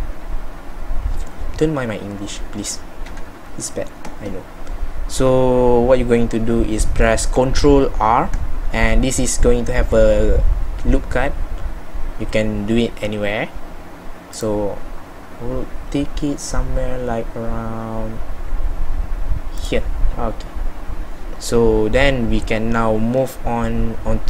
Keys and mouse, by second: 3.1 KP_1, 7.7 ctrl+r.